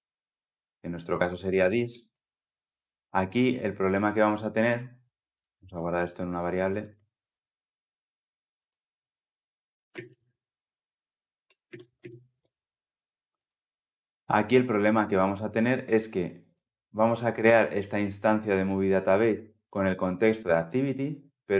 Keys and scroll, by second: 5.5 alt+Return, 11.3 Return.